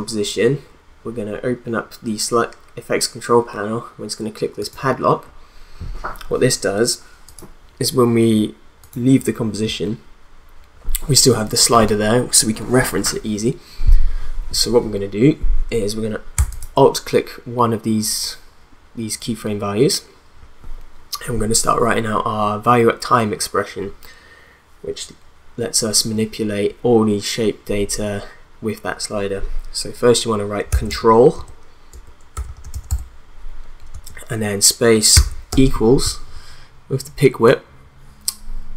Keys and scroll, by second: 30.4-33.9 typing, 35.1 =, 35.5 space.